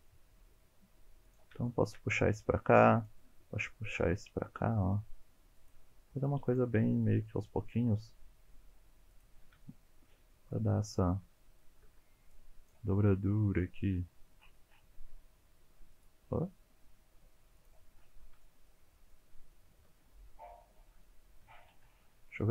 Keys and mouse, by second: 1.3 click, 1.8 shift+click, 2.8 click, 3.3 g, 5.6 click, 6.2 click, 6.9 g, 9.1 click, 9.6 shift+middle click, 10.3 shift+middle click, 11.5 shift+middle click, 12.3 click, 12.9 g, 15.2 g, 16.7 g, 17.5 click, 18.4 shift+middle click, 19.0 shift+middle click, 19.7 shift+click, 21.0 shift+click, 21.7 alt+z.